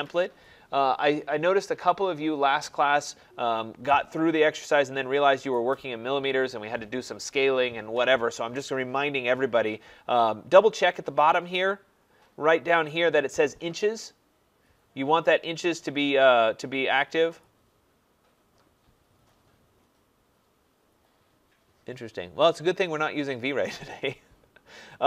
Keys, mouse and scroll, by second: 17.5 click, 18.5-22.6 drag, 24.1-25.0 drag.